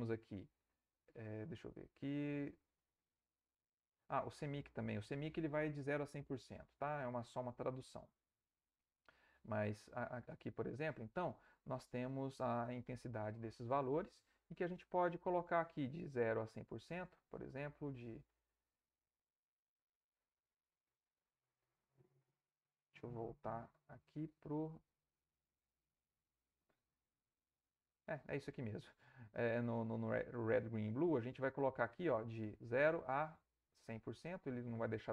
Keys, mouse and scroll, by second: 0.5 click, 1.4 click, 2.2 click, 2.9 click, 8.0 click, 9.7 click, 12.5 click, 16.9 click, 19.7 click, 20.7 click, 21.6 click, 23.1 click, 24.6 click, 25.5 click, 27.2 click, 31.7-34.1 drag.